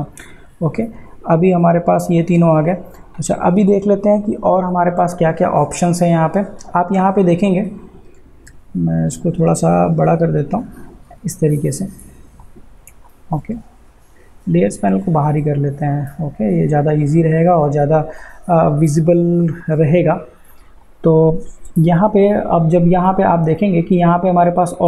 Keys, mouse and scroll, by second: 0.1 click, 10.1-24.8 drag.